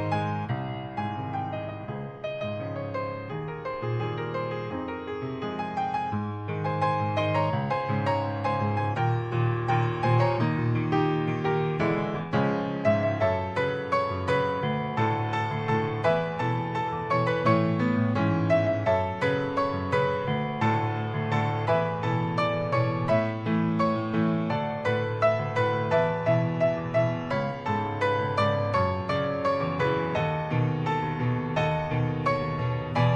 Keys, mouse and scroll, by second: 0.0 alt+middle click, 0.3 alt+middle click, 0.7-1.1 scroll up 1, 1.1 click, 2.3 click, 5.8 click, 7.9 click, 9.5 click, 12.7-13.0 scroll down 2, 14.1 click, 16.6-17.0 scroll up 2, 17.0 middle click, 17.7 click, 20.2-20.5 scroll down 1, 21.8 click, 22.9 click, 23.9-24.5 scroll down 1, 24.5 click, 25.1 scroll up 1, 25.7 middle click, 26.8 click, 27.5 middle click, 28.7 click, 29.3 middle click.